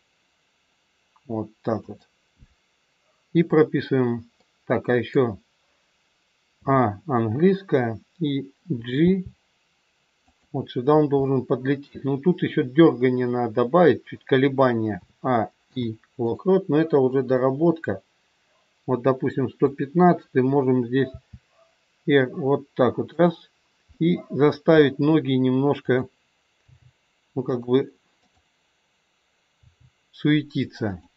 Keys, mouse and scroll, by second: 4.4 middle click, 6.5 a, 9.0 g, 11.2 middle click, 15.0 a, 15.6 i, 17.3 click, 20.9 r, 23.9 middle click, 25.7 middle click, 25.7 click, 26.7 g, 28.1 click, 29.5 g.